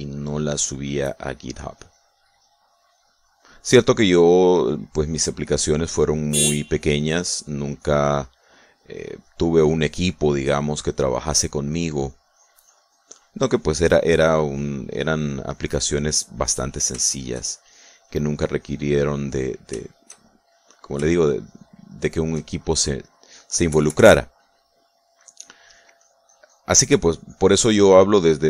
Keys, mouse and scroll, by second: 0.4 middle click, 1.3-3.6 drag, 3.7-5.8 drag, 5.9 click, 7.3 click, 7.8-12.4 drag, 13.0-16.0 drag, 15.4 right click, 16.1-17.8 drag, 18.0 shift+middle click, 18.6-20.6 shift+drag, 20.7-22.5 shift+middle drag, 22.6 shift+middle click, 24.4 KP_Subtract, 25.2 middle click, 26.3-27.9 middle drag, 27.9 click.